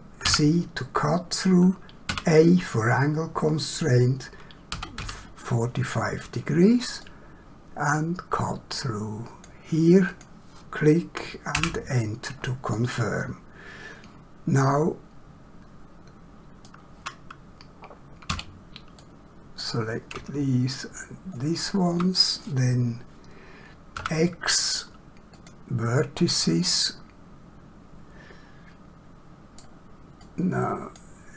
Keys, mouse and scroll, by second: 0.2 c, 2.0 a, 4.7 4, 4.9 5, 7.2 click, 10.0 click, 11.5 Return, 12.7 middle click, 18.3 <, 19.0 click, 20.8 shift+click, 23.9 x, 25.3 click, 26.4 middle click, 30.1 click.